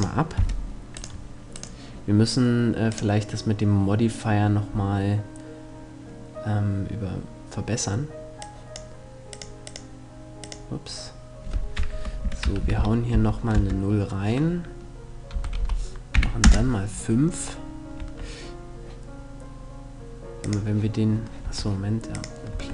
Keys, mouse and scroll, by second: 0.0 F11, 0.0-1.4 drag, 0.6-3.2 right drag, 2.5-4.4 drag, 8.0-11.7 drag, 17.6 Tab, 20.0-22.2 drag, 21.0 Tab, 22.2 Tab.